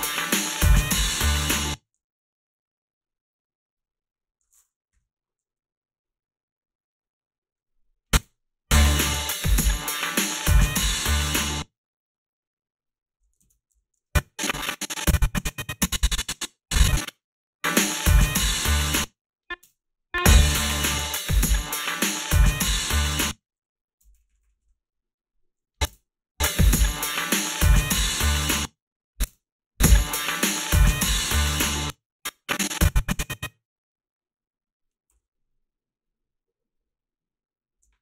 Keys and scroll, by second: 1.4 space, 8.2 space, 11.3 space, 13.7 ctrl+z, 17.1 space, 18.7 space, 19.6 space, 23.0-24.4 typing, 25.9 space, 28.3 space, 29.3 space, 31.6 space, 35.2 f.